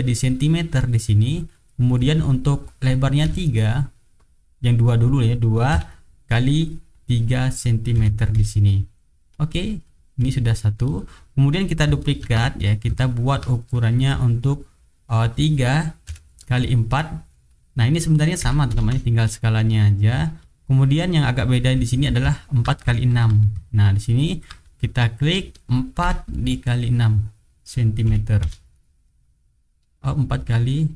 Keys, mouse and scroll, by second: 1.8 click, 3.2 KP_3, 4.8 click, 5.7 KP_2, 6.9 click, 7.9 KP_3, 8.3 Return, 9.3 click, 9.8 click, 12.2 ctrl+d, 12.7-13.4 ctrl+drag, 15.2 click, 16.0 KP_3, 17.2 click, 18.4 KP_4, 18.7 Return, 19.7 click, 22.0 ctrl+click, 23.1 ctrl+d, 23.4 ctrl+click, 25.2 click, 26.0 KP_4, 27.1 click, 28.0 KP_6, 28.4 Return, 30.4 click.